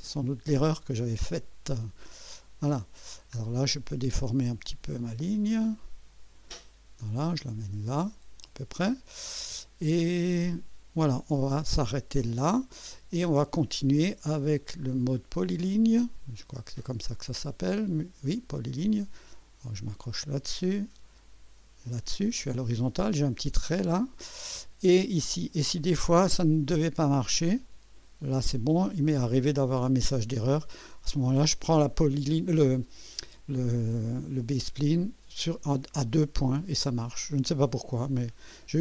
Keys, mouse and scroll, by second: 0.6 click, 1.3 right click, 2.1 scroll up 1, 2.6 right click, 3.1 scroll down 1, 5.0-6.6 drag, 7.2-8.5 drag, 14.4 click, 20.2 click, 21.9 click, 27.4 click, 37.3 right click, 38.1 scroll up 1.